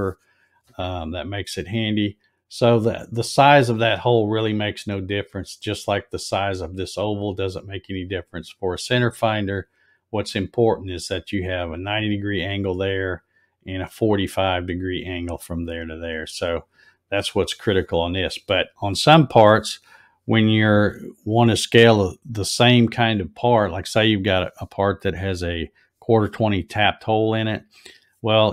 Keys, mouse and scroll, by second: 8.3 click.